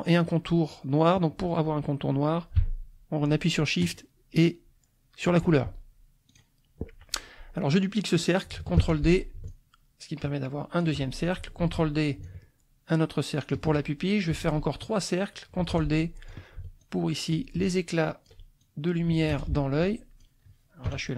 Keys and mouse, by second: 3.8 shift+click, 6.3 click, 8.8 ctrl+d, 9.5-11.0 ctrl+shift+drag, 11.6 ctrl+d, 12.2-13.7 ctrl+shift+drag, 15.6 ctrl+d, 15.7 ctrl+click, 16.8 ctrl+click, 17.6 ctrl+click, 18.6-20.4 ctrl+drag, 19.3 space, 20.9 Delete.